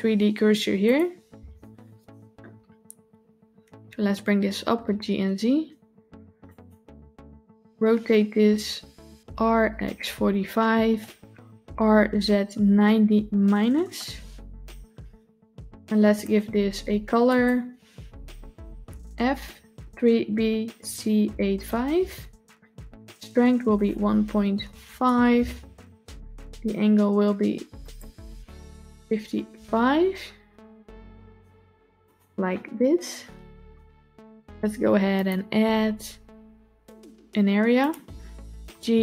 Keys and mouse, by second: 3.7 g, 9.0 r, 11.4 r, 16.1 click, 23.6-24.9 drag, 27.8-31.8 drag, 29.0 KP_5, 35.0-37.8 drag, 38.6 g.